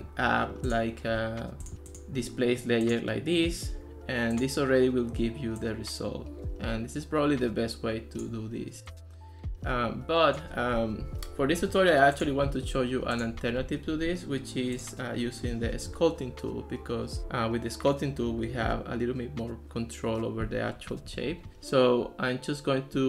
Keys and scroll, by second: 11.1 super+z.